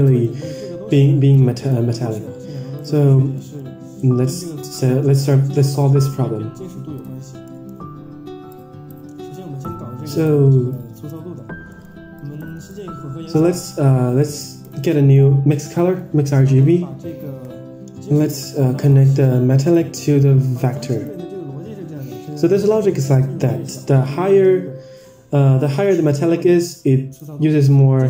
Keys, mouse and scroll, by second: 0.3-1.0 scroll down 4, 1.0 drag, 1.6 click, 3.3 middle click, 6.9 click, 7.4 middle click, 8.4 click, 9.2-9.6 drag, 10.0 drag, 10.6-11.1 drag, 11.6 middle click, 12.1 click, 12.5 shift+a, 15.5 click, 16.3 middle click, 18.8-19.7 drag, 20.5 click, 21.8-22.3 scroll up 4, 22.3 middle click, 25.0 click, 27.1 click.